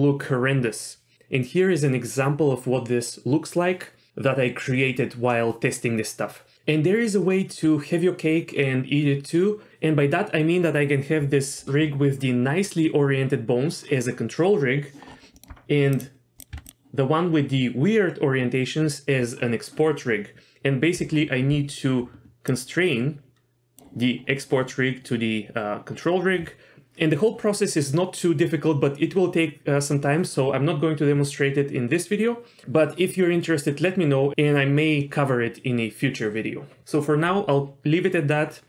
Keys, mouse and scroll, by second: 11.4-12.1 scroll down 3, 12.2 shift+middle drag, 15.1 scroll down 2, 15.3 middle click, 15.5-16.0 scroll up 2, 15.9 click, 16.4 click, 16.5 Tab, 16.6 click, 22.0 d, 22.4 d, 22.5-23.8 drag, 22.5 d, 23.8 d, 24.8 d.